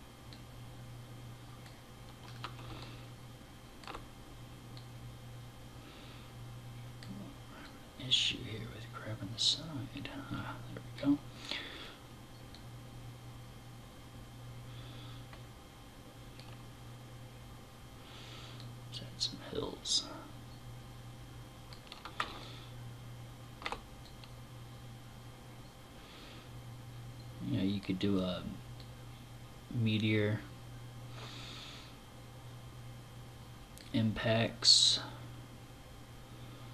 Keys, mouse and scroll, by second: 1.3 click, 1.6 scroll up 2, 2.2 middle click, 4.2 click, 7.0 click, 11.9 click, 18.0 click, 21.8 middle click, 23.5 click, 28.2 click, 34.4 click.